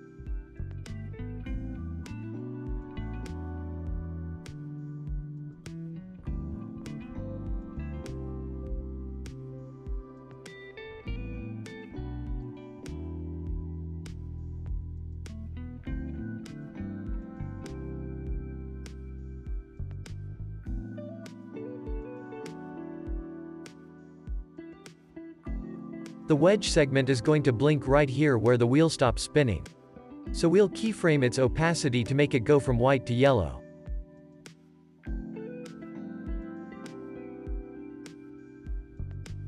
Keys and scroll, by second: 3.8 space, 8.4 space, 13.7 space, 21.3 space, 28.9 ctrl+s, 32.3 ctrl+s, 33.6 w.